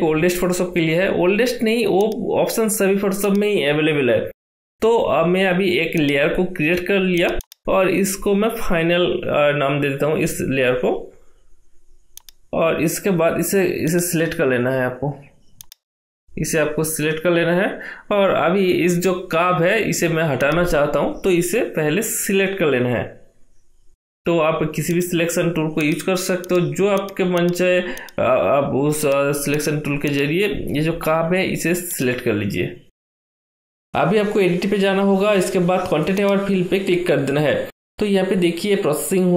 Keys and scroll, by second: 9.3-10.9 typing.